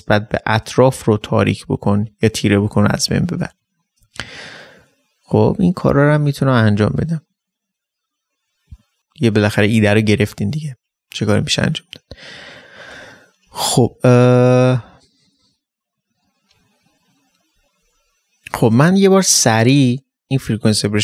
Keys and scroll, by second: 9.0 ctrl+space.